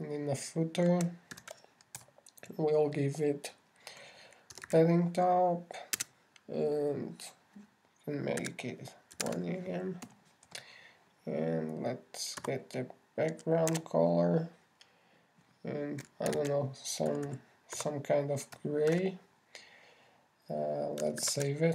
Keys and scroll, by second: 2.7 alt+shift+8, 3.4 alt+shift+Return, 4.0 shift+Return, 17.7 shift+3, 18.5 shift+c, 19.9 shift+c, 20.3 shift+,.